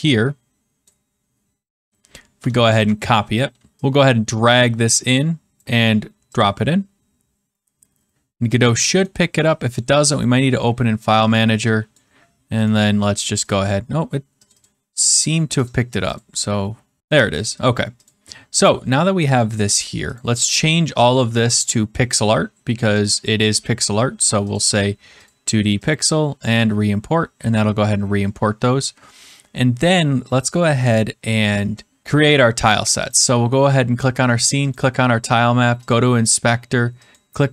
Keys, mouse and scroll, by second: 0.8 click, 2.6 ctrl+c, 3.7 alt+Tab, 5.5 click, 6.3 click, 9.0 right click, 10.1 click, 11.9 click, 12.6 right click, 13.5 click, 14.4 click, 15.6 click, 16.1 click, 17.6 click, 20.1 click, 20.3-20.8 middle click, 21.6 shift+click, 23.0 click, 24.5 click, 25.2 click, 31.7 click, 33.1 click, 34.7 click, 37.1 click.